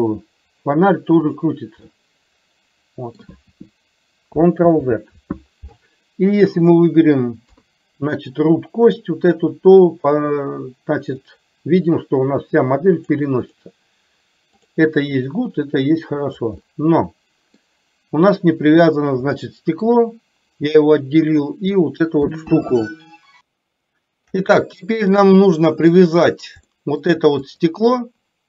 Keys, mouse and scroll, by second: 2.0-3.1 middle drag, 4.8 ctrl+z, 7.6 KP_3, 10.1 click, 11.4-13.3 drag, 13.5 click, 14.6 click, 15.3-16.4 drag, 16.8-17.6 middle drag, 19.5 shift+middle click, 23.5-24.3 shift+middle drag, 25.2-26.1 middle drag, 26.7-27.2 shift+middle drag, 27.5 click.